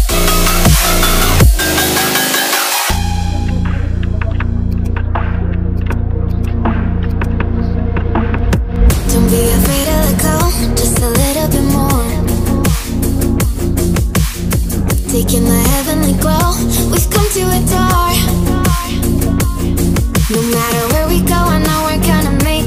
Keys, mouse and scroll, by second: 4.8-7.2 drag, 9.4 click, 11.4 click, 14.5 click, 16.5 click, 21.8-22.6 drag.